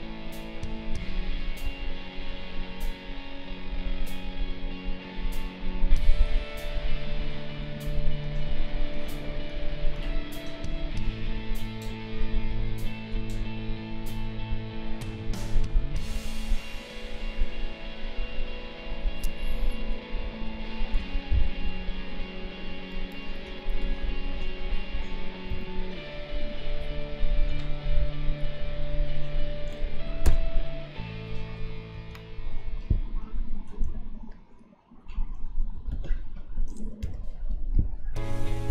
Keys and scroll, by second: 7.9 space, 20.2 space, 22.3 ctrl+=, 23.4 space, 25.5 q, 27.5 Delete, 33.8 q, 35.7 Delete, 37.5 space.